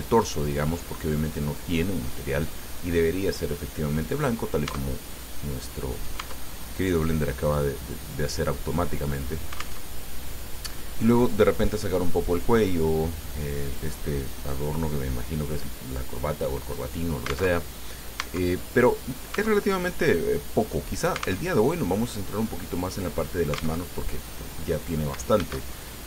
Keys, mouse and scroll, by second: 1.8 click, 4.9 Tab, 5.4-6.5 drag, 6.5 Tab, 6.9-9.4 drag, 10.1 alt+Tab, 17.8 alt+Tab, 18.5 Tab, 18.9 click, 19.6 Tab, 20.0-21.1 drag, 21.7 alt+Tab, 24.1 alt+Tab, 25.7 shift+a.